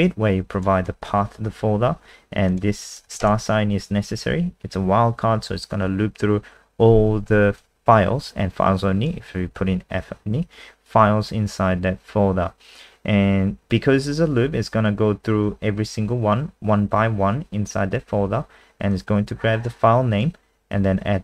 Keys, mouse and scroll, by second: 3.1 shift+Left, 7.6 click.